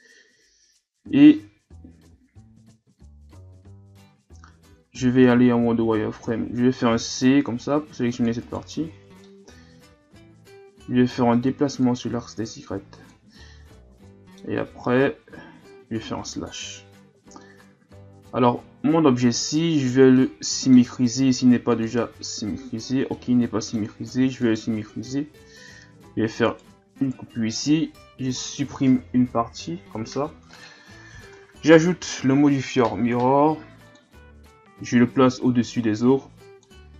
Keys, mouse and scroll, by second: 5.2 z, 6.9 c, 8.7 z, 8.9-9.2 scroll down 4, 9.2-11.8 middle drag, 11.8-13.4 drag, 13.4-16.2 middle drag, 16.2 KP_Divide, 17.4-21.7 middle drag, 21.7-23.2 drag, 23.2-24.4 middle drag, 24.4 alt+right click, 26.0 v, 27.0 right click, 28.1 l, 29.7 Delete, 31.2 Tab, 34.0-35.7 drag, 36.0-36.6 drag.